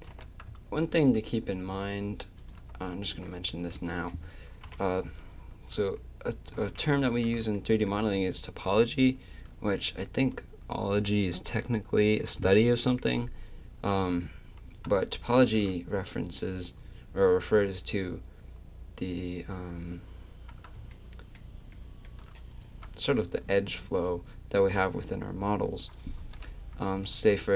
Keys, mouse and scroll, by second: 0.1-2.4 drag, 0.1 g, 3.5 Tab, 4.6 KP_7, 5.5 Tab, 6.5 a, 22.5-24.4 right drag.